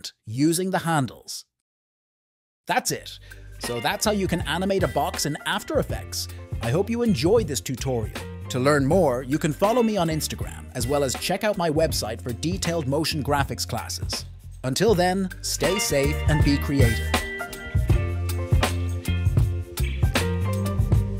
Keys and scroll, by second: 2.8 space, 3.7 `.